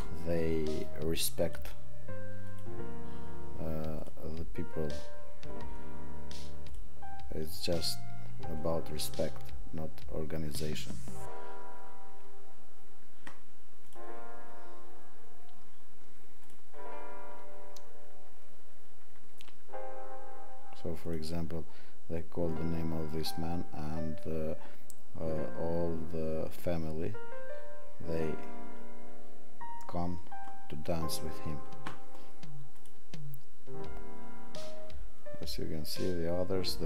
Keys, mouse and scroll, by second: 4.0 click.